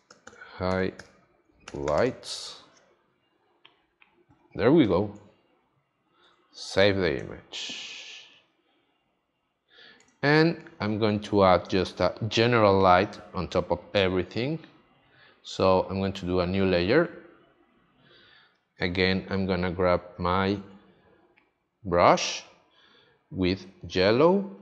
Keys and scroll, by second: 3.0 s, 6.2 super+s, 7.1 space, 10.0 space, 23.8 x.